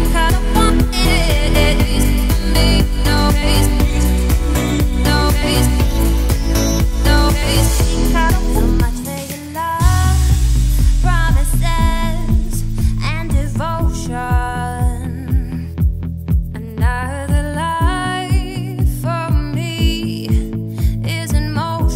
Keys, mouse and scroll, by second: 1.2 click, 1.9 click, 2.4 Tab, 2.6-3.0 scroll up 2, 3.0 a, 3.4 shift+middle click, 3.6-4.5 scroll up 3, 4.5-5.0 scroll down 1, 5.0 shift+d, 10.4-10.8 scroll up 4, 10.8 shift+middle click, 11.1-11.7 scroll up 3, 11.7 click, 13.1 shift+click, 13.7-14.0 scroll down 5, 14.0 middle click, 14.9 `, 15.8 `, 16.9 scroll down 3, 17.2 shift+middle click, 17.5-18.2 scroll up 5, 18.2 shift+click.